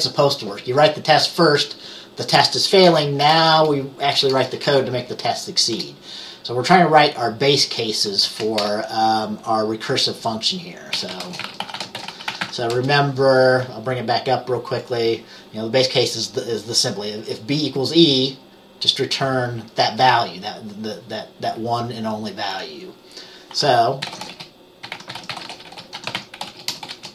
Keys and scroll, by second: 3.3 BackSpace, 3.5 BackSpace, 4.3 BackSpace, 8.4 Right, 8.7 BackSpace, 10.8-13.1 typing, 24.0-27.1 typing.